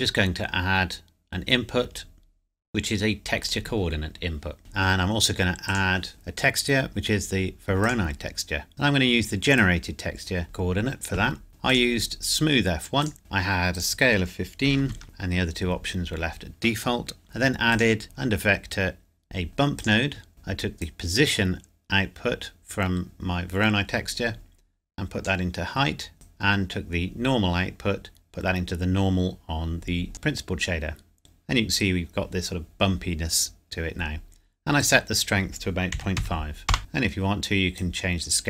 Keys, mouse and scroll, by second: 3.4 click, 5.7 click, 7.8 click, 8.7 scroll down 1, 9.6 click, 11.7 click, 13.2 shift+middle click, 13.7 click, 14.7 KP_1, 14.8 KP_5, 15.0 KP_Enter, 17.2 click, 19.8 click, 20.8 click, 26.3 click, 33.7-34.2 scroll down 1, 34.9 click, 35.9 KP_Decimal, 36.2 KP_5, 36.8-37.1 scroll up 1, 37.9 click.